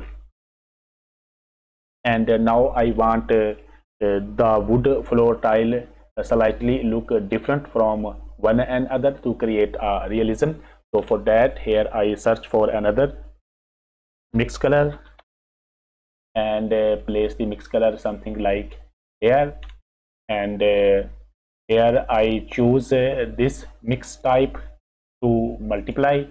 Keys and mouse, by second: 11.5 click, 14.3 shift+a, 24.1-25.9 drag.